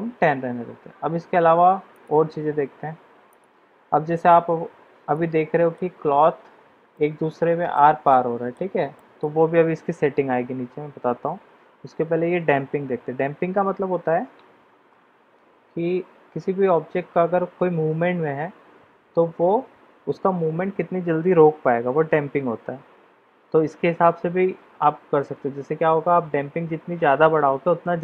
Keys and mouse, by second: 5.1-5.7 middle drag, 6.9-7.7 middle drag, 8.0-8.6 middle drag, 8.9 middle drag.